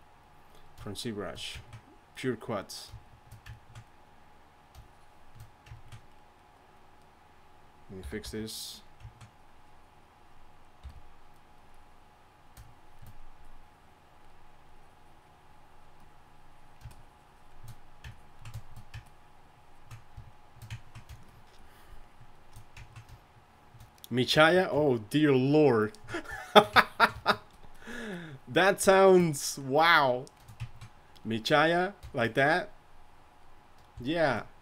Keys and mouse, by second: 8.2 y, 8.2 f, 10.5-18.6 drag, 10.8 f, 18.7-26.5 drag, 26.9-29.1 drag.